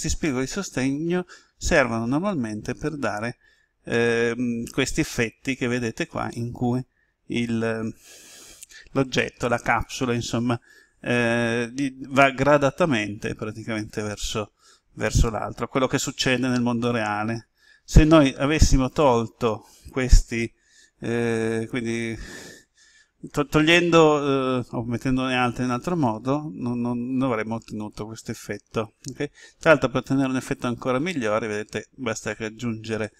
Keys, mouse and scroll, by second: 30.4 click, 33.0-33.1 middle drag.